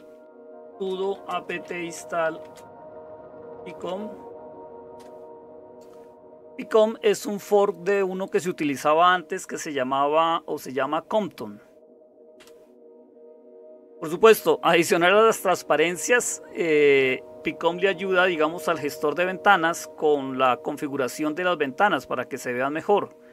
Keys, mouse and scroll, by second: 0.0-23.3 typing, 4.9 Return, 12.3 Return.